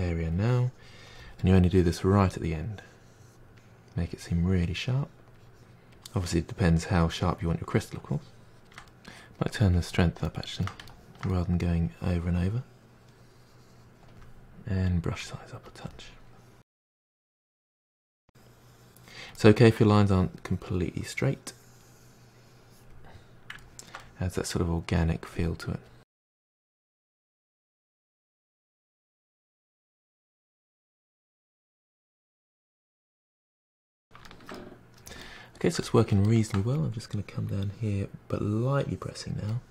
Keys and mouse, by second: 0.8-2.0 middle drag, 2.0-4.7 drag, 4.7-5.3 shift+middle drag, 5.3-8.6 drag, 8.6-9.8 shift+middle drag, 9.8-10.3 drag, 10.3-11.9 shift+middle drag, 11.9-14.9 drag, 15.2 f, 16.3-18.3 drag, 18.3 middle click, 18.4-19.1 drag, 19.1 middle drag, 19.4-19.9 drag, 19.9 shift+middle click, 20.1-20.9 drag, 21.0-22.0 ctrl+middle drag, 22.0-22.8 drag, 23.3 shift+middle drag, 23.5 ctrl+z, 23.6 middle click, 23.9 f, 24.1-25.6 drag, 25.6 middle drag, 25.8-26.7 drag, 26.7 middle drag, 27.0 drag, 27.2 middle drag, 27.5-27.8 drag, 27.8-28.2 middle drag, 28.2-29.5 drag, 29.5 ctrl+z, 29.6 ctrl+z, 29.8-30.7 drag, 30.7 middle drag, 31.0-33.0 drag, 33.0-37.1 ctrl+middle drag, 37.1-39.6 drag, 39.6-39.7 shift+middle drag.